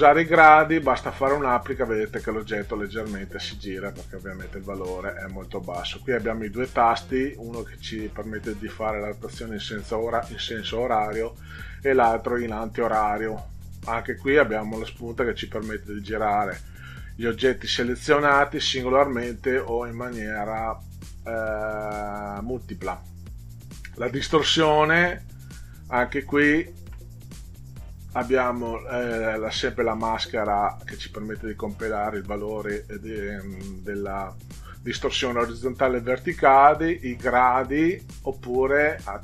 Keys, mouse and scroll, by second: 1.3 click, 3.4 click, 3.8 click, 4.0 click, 4.3 click, 22.7 click, 36.5 click.